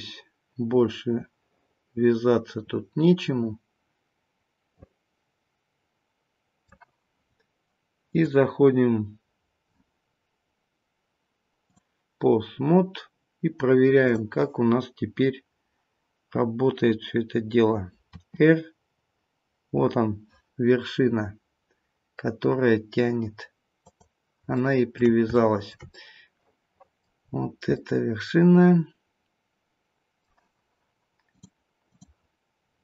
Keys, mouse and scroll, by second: 7.9 click, 12.8-13.4 scroll down 2, 14.0 click, 18.0 r, 24.5 shift+middle click, 25.7 shift+middle click, 25.9 middle click, 27.1-27.7 scroll up 1, 27.7 middle click, 27.7-28.3 scroll up 3, 31.2 click, 32.6 scroll down 2.